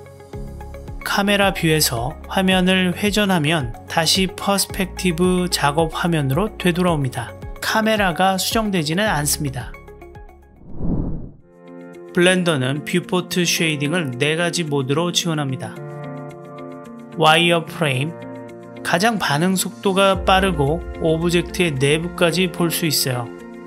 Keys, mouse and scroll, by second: 3.0-4.7 drag, 8.3 click, 9.2 click, 9.7-10.9 drag, 16.8-18.2 drag, 20.3-20.9 shift+middle drag, 22.4-23.6 middle drag.